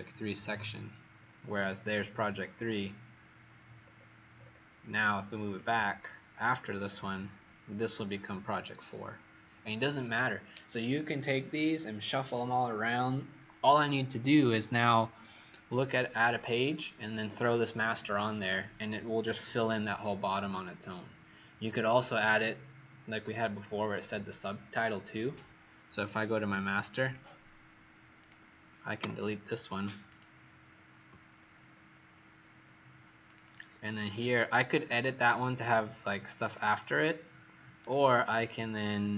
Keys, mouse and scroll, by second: 1.1-3.2 scroll up 4, 3.8-5.5 scroll down 4, 5.5 click, 26.9 click, 28.1 click, 28.9 Delete, 30.0 click, 31.3-31.6 alt+scroll up 2, 32.3-32.6 alt+scroll up 3, 33.2 click, 33.2 alt+scroll up 1, 33.3 click, 34.0 click, 35.4 click, 37.7 right click.